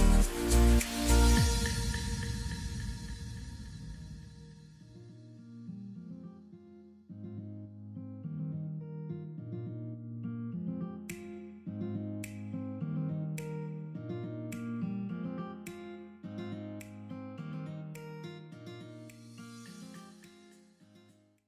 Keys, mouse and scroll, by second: 3.2-3.8 scroll up 1.